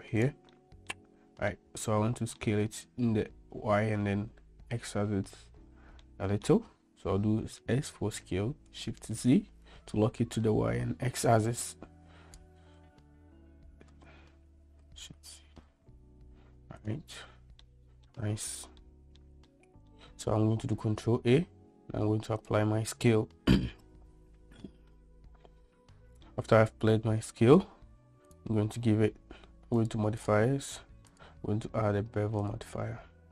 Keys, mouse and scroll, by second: 0.6-0.9 middle drag, 1.6-2.5 middle drag, 6.1-6.5 middle drag, 7.6 s, 13.6 s, 17.7-18.1 middle drag, 18.9-19.2 middle drag, 19.6-20.0 shift+middle drag, 20.8 ctrl+a, 23.9-25.0 middle drag, 26.0 middle click, 28.4-30.0 drag, 30.3 click, 31.2-33.3 drag.